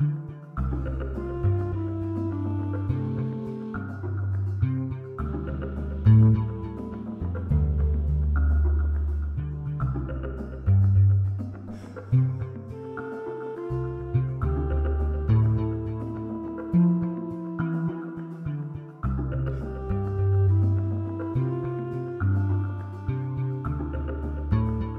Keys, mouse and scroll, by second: 4.7 click, 5.1-8.9 ctrl+shift+drag, 17.9 click.